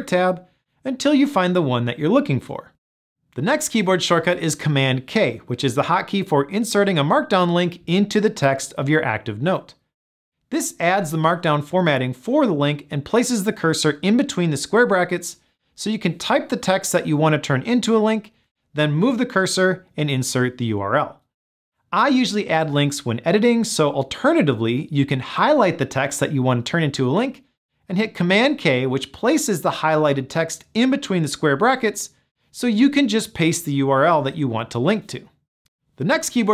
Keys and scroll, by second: 11.1 super+k, 28.6 super+k, 33.8 super+v.